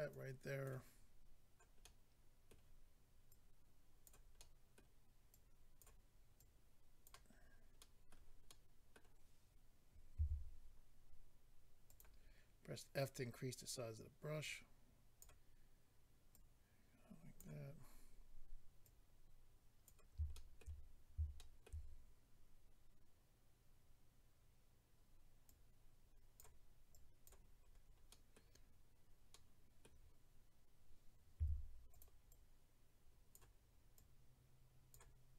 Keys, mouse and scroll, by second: 0.1 click, 1.8 middle click, 3.3 click, 4.4 middle click, 5.3 click, 6.4 click, 7.4-7.8 scroll down 2, 7.8 middle click, 8.5 middle click, 10.2 f, 11.9 click, 12.0 click, 12.2-13.2 scroll up 1, 13.4 scroll up 1, 14.4 click, 16.3 click, 18.8 click, 20.3 shift+middle click, 21.3 shift+middle click, 21.9-22.9 scroll up 2, 25.4 click, 26.9 click, 27.6-28.3 scroll down 2, 28.1 middle click, 29.3 middle click, 31.9 click, 31.9 f, 32.0 click, 32.2 click, 33.9 click.